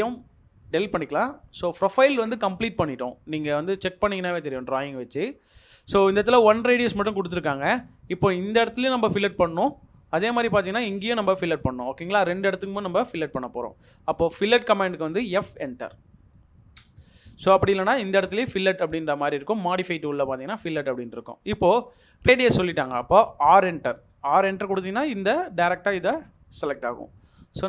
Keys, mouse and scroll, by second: 0.4 double click, 0.4 Delete, 0.9-1.3 scroll down 1, 1.3 middle click, 13.7 middle click, 14.9 middle click, 15.6 f.